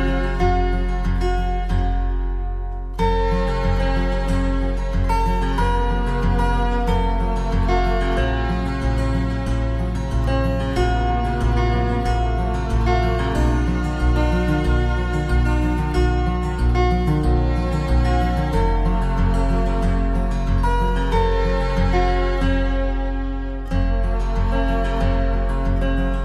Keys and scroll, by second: 12.5 ctrl+c, 12.5 ctrl+v, 14.9 ctrl+c, 14.9 ctrl+v, 24.0 ctrl+c, 24.1 ctrl+v.